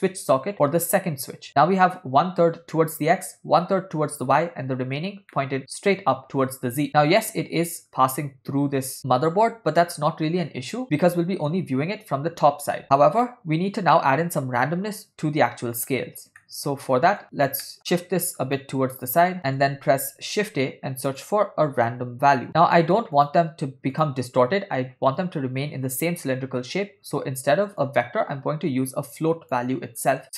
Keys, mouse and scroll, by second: 5.4-5.9 middle drag, 7.3-8.1 middle drag, 11.1-12.8 middle drag, 13.3-14.3 ctrl+middle drag, 16.4 middle click, 17.7 middle click, 17.8 click, 18.6 middle click, 19.4 click, 20.4 shift+a, 27.9-29.6 drag, 29.9 middle click.